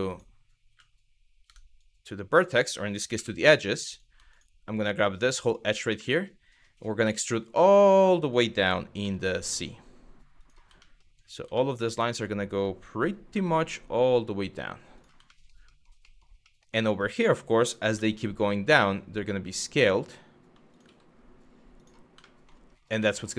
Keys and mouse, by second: 1.1 Tab, 1.4 click, 2.8 2, 4.4 shift+click, 5.7 middle click, 6.6 e, 8.6 z, 10.0 click, 11.2 middle click, 12.9 g, 14.6 click, 14.9 middle click, 15.4 middle click, 15.8 middle click, 16.2 shift+middle click, 17.6 s, 20.3 click, 20.5 g, 21.4 click, 21.9 middle click, 22.8 middle click.